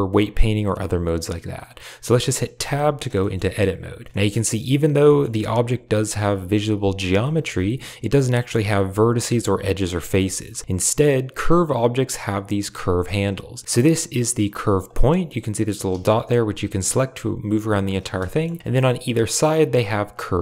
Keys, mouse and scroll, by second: 2.5 Tab, 3.1 shift+middle click, 4.0 shift+middle click, 4.3 shift+middle click, 5.0 shift+middle click, 7.1 shift+middle click, 9.9 middle click, 10.2 shift+middle click, 11.4 click, 13.6 g, 14.8 shift+middle click, 16.5 g, 18.1 shift+middle click, 18.6 click, 19.4 click, 20.0 click, 20.2 g.